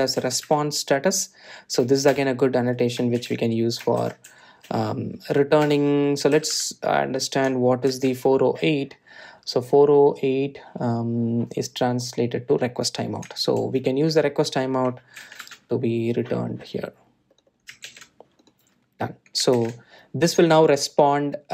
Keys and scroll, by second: 3.3 Return, 9.1 super+b, 14.8 super+c, 16.4 super+e, 19.0 super+e, 20.7 super+v.